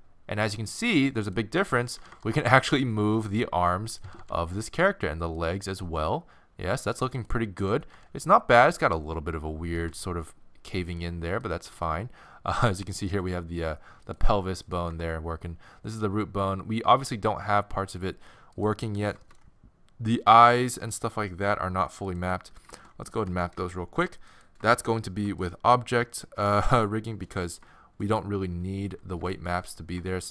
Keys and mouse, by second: 1.1 click, 1.8 right click, 2.0 r, 3.6 right click, 4.1 r, 5.8 r, 7.1 click, 7.6-9.8 right drag, 8.0 r, 9.8 r, 11.5-13.2 right drag, 11.8 r, 13.2 g, 14.7-16.3 right drag, 14.9 g, 18.9 middle click, 23.3 ctrl+Tab, 28.9 z.